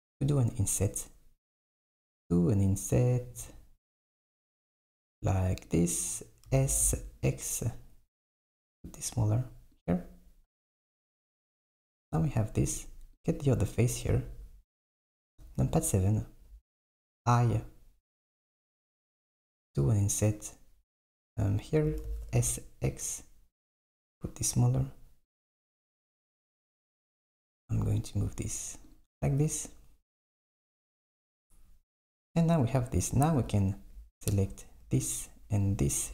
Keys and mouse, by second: 6.5 s, 13.3 click, 14.1 KP_7, 22.1 s, 26.2 g, 30.9 s, 33.4 click, 34.3 click, 35.7 shift+click.